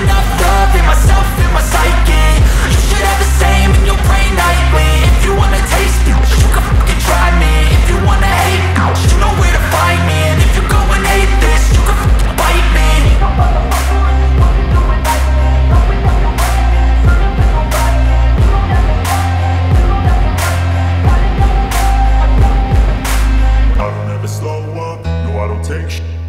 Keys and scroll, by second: 23.3 space.